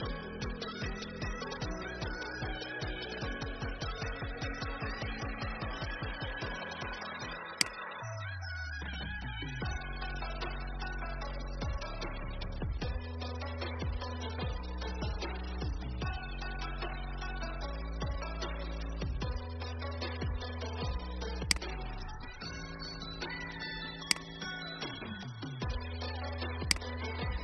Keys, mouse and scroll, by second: 5.2-5.6 scroll down 1, 7.5 alt+click, 21.5 click, 26.7 click.